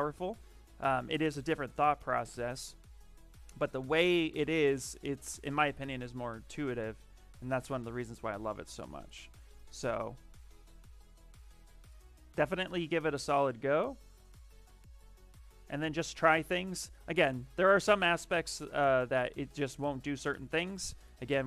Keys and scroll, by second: 0.7 shift+f, 7.2 shift+d.